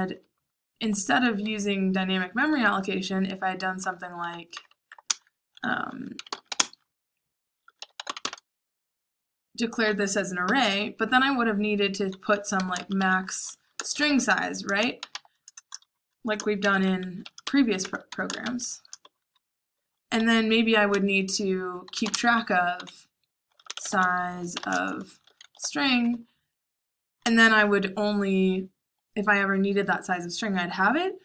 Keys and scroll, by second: 0.0-8.6 typing, 12.3-26.0 typing.